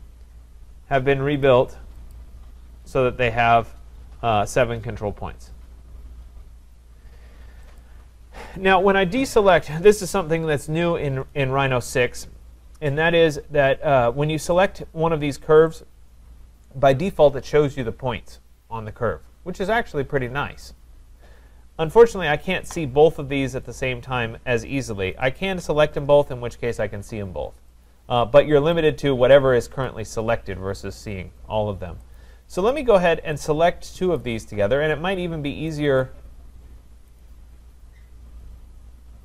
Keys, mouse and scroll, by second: 1.4 click, 1.4 click, 2.1 click, 7.8 click, 9.9 click, 14.7 click, 15.8 click, 22.1 click, 23.7 click, 25.4 shift+click, 27.8 click, 28.9 click, 29.8 click, 32.2 click, 34.2 click, 35.8 click, 36.0 click, 37.2 click, 37.5-38.0 scroll, 38.1-39.2 scroll.